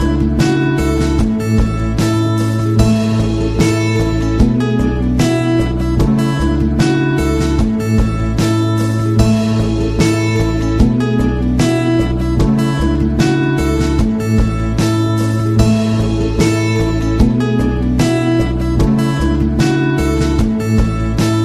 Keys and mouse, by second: 1.8-3.3 drag, 1.8 KP_0, 3.3 g, 4.3 middle click, 4.9 r, 6.1 g, 6.9 middle click, 8.2-11.6 typing, 14.0-16.2 drag, 16.2-16.5 middle drag, 16.7 g, 19.7-20.6 drag, 20.6-20.9 middle drag, 21.3 right drag.